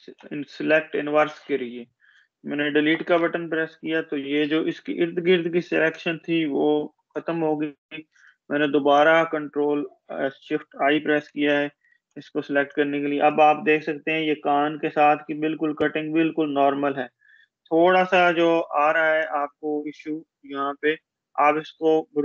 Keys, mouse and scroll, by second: 0.1 ctrl+shift+i, 2.6 Delete, 6.6 ctrl+shift+i, 8.5-9.6 space, 11.1 ctrl+=, 12.1-12.9 space, 16.0 ctrl+d, 17.2 space, 19.0 space, 19.2-20.6 click, 20.6 space, 21.2-22.0 click.